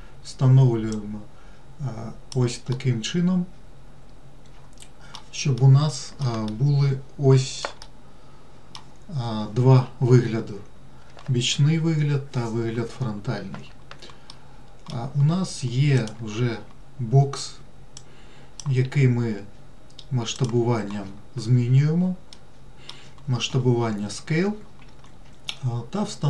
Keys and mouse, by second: 1.3-2.7 drag, 3.1-5.5 middle drag, 5.9-6.6 middle drag, 6.8-8.0 shift+middle drag, 8.2 middle click, 14.6 middle click, 16.4 click, 18.3 click, 19.2 s, 22.6-23.2 middle drag.